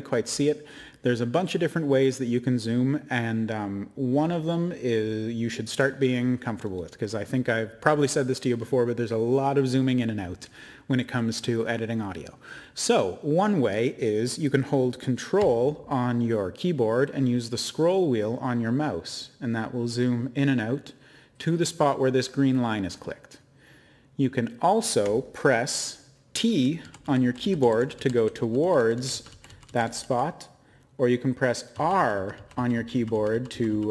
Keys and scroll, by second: 28.9 typing, 30.1 typing, 32.1 r, 33.4-33.9 typing.